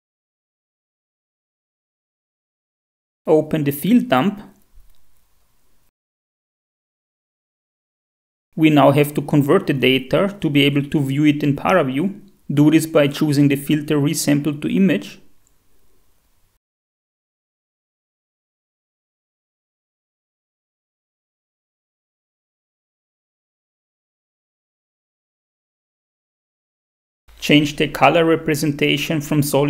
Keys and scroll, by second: 2.6 shift+F5, 2.8 shift+F4, 28.8 shift+F5, 28.9 shift+F4.